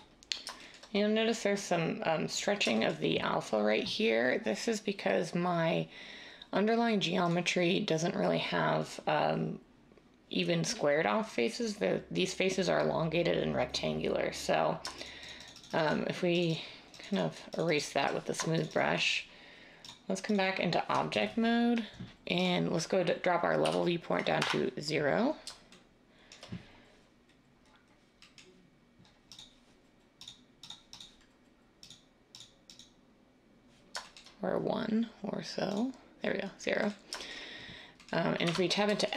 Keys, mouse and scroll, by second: 23.6 o, 24.4 Return, 38.4 Tab.